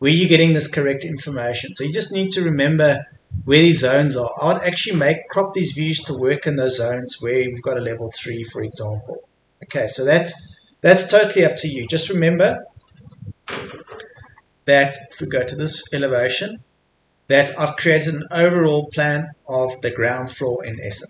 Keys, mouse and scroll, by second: 0.2-1.2 scroll down 1, 1.2 click, 2.6-4.8 middle drag, 4.8 scroll up 1, 6.9-9.6 scroll down 1, 9.6-10.3 scroll up 1, 10.3-11.4 scroll down 1, 11.4 click, 13.5-13.9 scroll down 1, 13.9 middle click, 14.4 scroll up 1, 15.1 Escape, 15.6 click, 16.7 scroll up 1, 16.9 Escape, 17.4-19.8 scroll down 1, 19.8 Escape, 20.7 click.